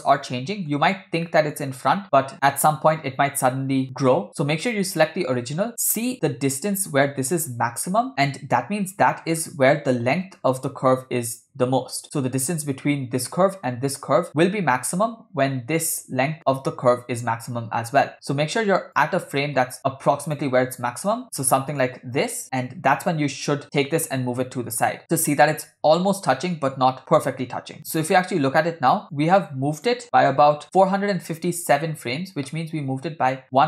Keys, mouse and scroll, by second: 0.3-0.8 middle drag, 1.3 shift+middle drag, 1.6-2.1 scroll up 3, 4.5 click, 5.5-6.0 scroll up 2, 6.0 shift+middle click, 8.1-8.8 scroll down 4, 9.0-9.4 scroll down 1, 9.4-10.5 scroll up 2, 10.5 scroll up 2, 10.5 scroll down 2, 11.7-14.2 scroll down 2, 15.1 scroll down 3, 16.6-17.0 scroll down 2, 17.1-19.0 scroll up 3, 19.0 click, 21.2 Left, 22.4 click, 25.0 g, 27.8-28.1 scroll up 3, 28.2 middle click, 28.5-29.1 scroll up 2, 29.1 click, 30.0 Left, 30.9 Right.